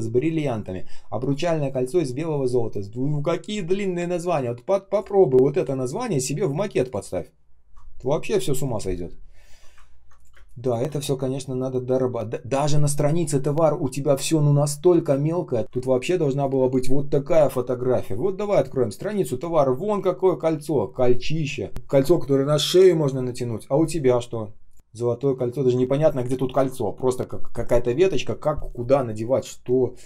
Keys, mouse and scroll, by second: 9.7 ctrl+scroll down 1, 10.2 space, 10.7 space, 10.9 ctrl+scroll up 1, 13.2 shift+0, 15.6 ctrl+я, 16.0 к.